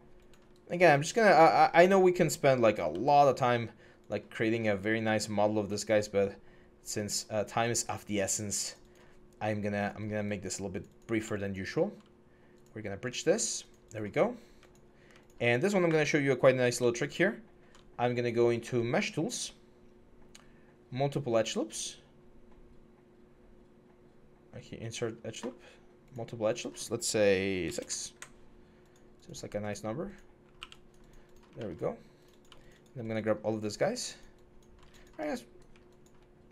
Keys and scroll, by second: 27.4 6, 27.6 Return, 30.3 q, 30.6 g.